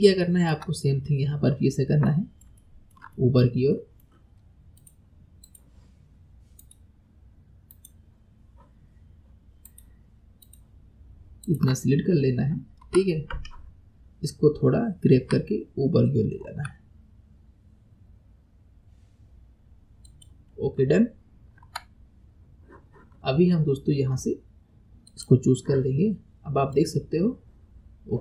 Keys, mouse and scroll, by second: 0.3 shift+middle click, 0.9-1.9 scroll down 2, 2.1-4.8 middle drag, 4.8 click, 5.5 shift+click, 6.6 shift+click, 7.7 shift+click, 9.7 shift+click, 10.4 shift+click, 11.5 shift+click, 11.9-12.5 scroll down 5, 12.9 KP_1, 13.8 scroll up 2, 20.5-20.8 scroll down 4, 21.7 Tab, 25.1 click, 26.7-28.2 drag.